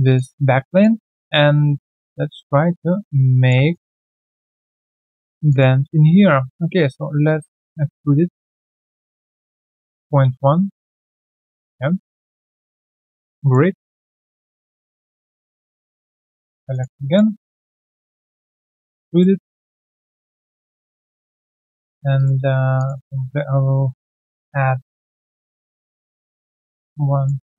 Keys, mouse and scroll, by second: 0.1 alt+click, 0.6 alt+middle click, 0.9 alt+right click, 1.2 alt+right click, 2.1 Right, 3.6 Tab, 3.7 alt+click, 3.9 alt+right click, 4.2 alt+middle click, 4.6 alt+click, 4.9 alt+right click, 5.1 alt+middle click, 5.4 alt+click, 5.9 shift+right click, 9.6 typing, 9.8 Return, 10.6 alt+click, 10.9 typing, 11.4 alt+right click, 11.9 alt+middle click, 12.3 alt+right click, 12.6 alt+right click, 13.7 alt+middle click, 14.0 alt+click, 14.4 right click, 15.7 Tab, 15.7 right click, 16.7 alt+click, 17.0 alt+middle click, 17.2 alt+right click, 17.5 w, 18.4 shift+click, 19.4 alt+right click, 20.0 alt+click, 20.0 alt+middle click, 20.5 alt+click, 21.7 alt+middle click, 23.1 shift+click, 24.2 ctrl+alt+q, 25.9 Return, 27.1 alt+click.